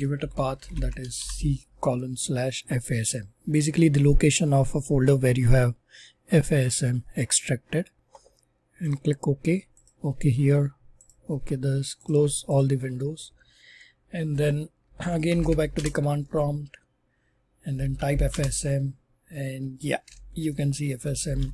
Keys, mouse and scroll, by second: 12.1 click, 12.5 click, 14.9 super+r, 15.0-15.9 typing, 17.4-18.5 typing, 20.9-21.5 typing.